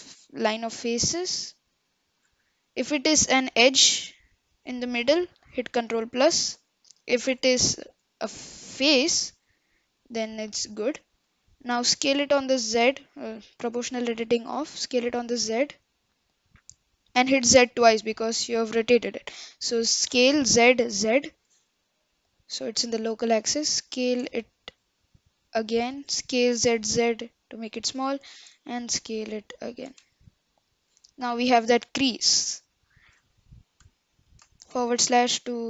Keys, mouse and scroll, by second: 2.5-3.0 scroll up 1, 3.0-3.7 scroll down 1, 3.7-4.1 scroll down 1, 4.1-5.8 middle drag, 5.8 ctrl+KP_6, 6.5 ctrl+KP_Add, 7.6 shift+middle click, 8.1 scroll up 1, 9.5-12.0 middle drag, 12.0 s, 13.2 o, 13.5-13.9 scroll down 1, 13.9 middle click, 14.7 s, 20.2 s, 23.9 s, 26.3 s, 28.3 s, 30.0 Tab, 30.2-31.7 middle drag, 31.7-32.2 scroll down 2, 32.2-33.8 middle drag, 33.8 KP_Divide, 34.4-34.8 scroll down 5, 34.8-35.6 middle drag.